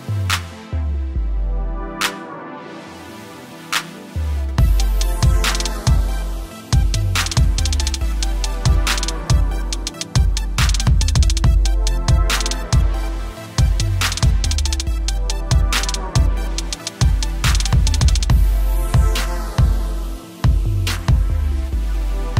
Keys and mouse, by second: 0.8 space, 2.7-4.0 typing, 3.6 click, 5.3 click, 13.2 click, 17.2 click.